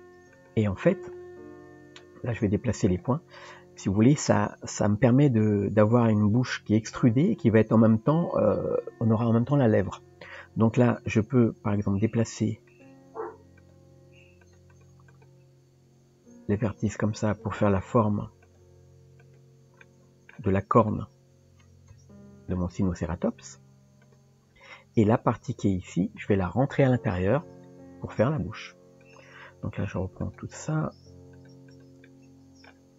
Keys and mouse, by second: 3.0 click, 4.3-6.9 middle drag, 10.2 click, 11.1 click, 13.6 click, 14.7 click, 15.1 click, 18.4 click, 19.2 click, 19.9 middle click, 20.8 click, 21.9 KP_3, 22.9 g, 29.0 click, 29.8 shift+click, 30.2 shift+click, 30.7 shift+click, 31.4 shift+click, 31.7 shift+click, 32.1 middle click.